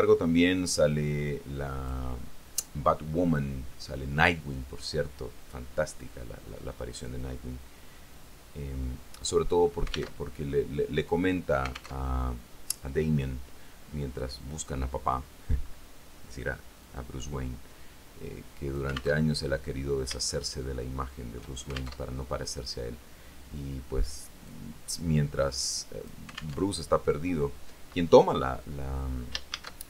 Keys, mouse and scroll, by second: 0.9-2.3 drag, 8.3-9.6 drag, 10.4 alt+Tab, 12.2 alt+Tab, 15.2-15.7 scroll down 2, 15.8-16.4 scroll up 2, 17.0-19.5 drag, 19.5 alt+Tab, 20.5-21.7 shift+middle drag, 22.1 alt+shift+F4, 22.2 alt+shift+Tab, 24.7-26.4 drag, 26.9 alt+Tab, 29.7 shift+a.